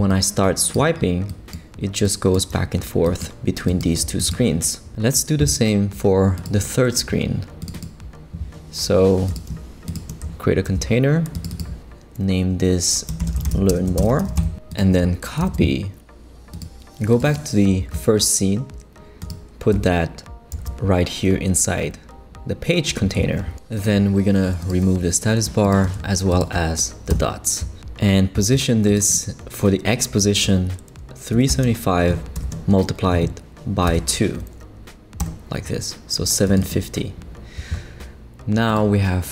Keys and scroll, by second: 10.7 shift+super+g, 11.2 super+g, 12.9-14.7 typing, 15.4 super+c, 20.5 super+v, 27.1 super+BackSpace, 27.6 BackSpace, 31.1-32.4 typing, 33.9 2, 35.2 Return.